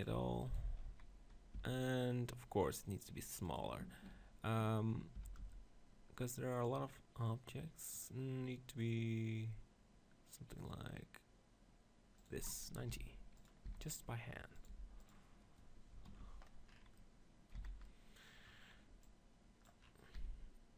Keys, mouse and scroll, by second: 0.9 z, 1.6 r, 3.6-5.4 shift+drag, 5.3 r, 12.5 click, 12.9 g, 13.7 s, 14.7 g, 16.8 click, 17.6 z, 19.0 click, 20.1 s.